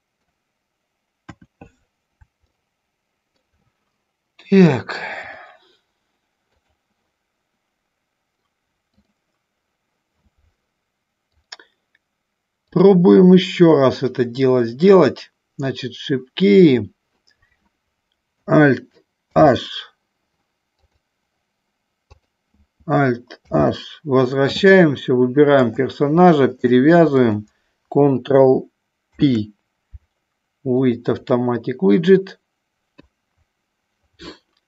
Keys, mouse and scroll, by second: 1.5 KP_1, 2.6 shift+middle click, 4.9 click, 12.7-21.0 drag, 23.5 alt+h, 25.7 click, 26.7 shift+click, 29.2 ctrl+p.